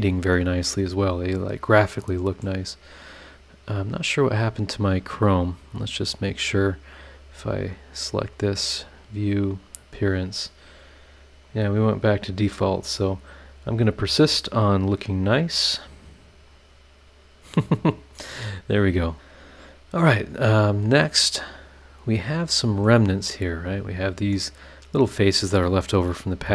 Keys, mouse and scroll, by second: 0.7 scroll down 2, 1.3 scroll down 2, 2.0 middle click, 3.9 click, 4.4 click, 5.0 click, 6.1 click, 6.6 click, 7.5 click, 8.6 click, 9.5 click, 11.4 click, 14.6 click, 16.5 click, 17.2 click, 19.5 scroll up 2, 21.0-22.6 middle drag, 21.1-22.6 right drag, 22.6 click, 23.0-23.9 scroll up 3, 24.0 click, 24.3 middle click, 24.4 click, 24.4 right click, 25.3 scroll down 2, 26.1-26.4 scroll up 2, 26.4 middle click.